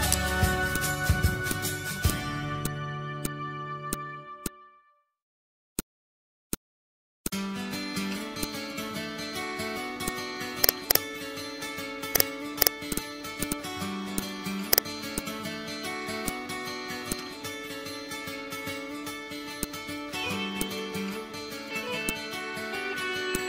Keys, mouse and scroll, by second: 0.1 right click, 0.7 click, 0.8-4.3 drag, 4.3 z, 4.4-7.2 drag, 8.4 click, 9.0 ctrl+z, 10.0 click, 11.4 ctrl+q, 12.1 click, 15.5 ctrl+z, 16.2 click, 17.9 Insert, 19.1 Insert.